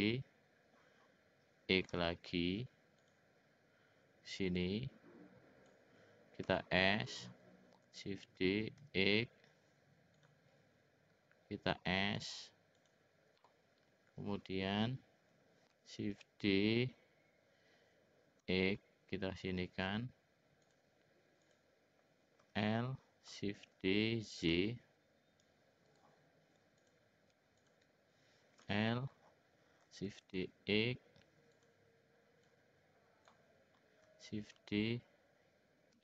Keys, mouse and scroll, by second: 4.4-5.7 drag, 6.4 s, 8.2 shift+d, 12.2 s, 13.5 middle click, 14.9 l, 16.0 shift+d, 21.4 click, 22.4 l, 23.5 shift+d, 26.8 click, 27.6 click, 28.6 l, 30.1 shift+d, 32.5 click, 34.4 shift+d.